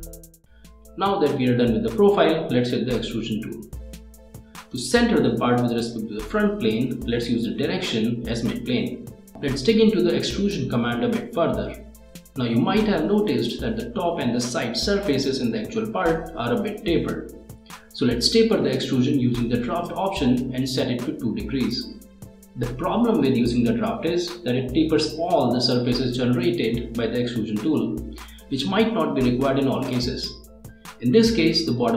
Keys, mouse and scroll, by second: 0.8 click, 1.9 click, 4.5 click, 6.5 click, 7.4 1, 8.7-9.5 typing, 11.2 click, 16.7 click, 25.5-30.6 middle drag, 30.8 click, 31.8 click.